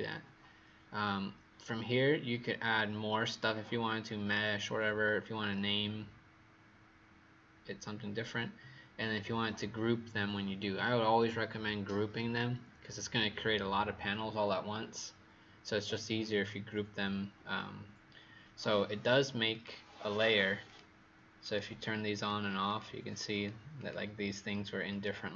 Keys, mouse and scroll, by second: 22.6 click, 23.2 click, 23.7 click, 24.8 click.